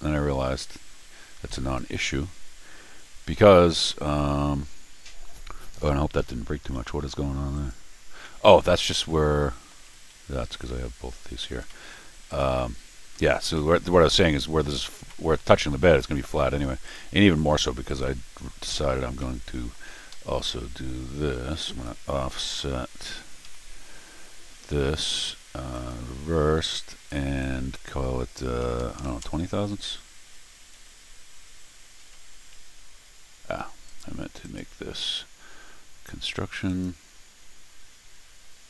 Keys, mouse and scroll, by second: 3.9-6.8 middle drag, 7.5 click, 8.2-9.7 middle drag, 9.9 Escape, 10.5 Tab, 11.7 middle click, 12.3 click, 12.6 middle click, 13.6 middle click, 15.1 middle click, 16.4 middle click, 16.9 click, 17.9 click, 19.0 scroll down 2, 19.2 middle click, 20.1 Escape, 21.7 click, 23.4 o, 25.7 click, 26.8 click, 27.4 click, 33.6 Escape, 33.9 right click, 34.4 right click, 36.7 click.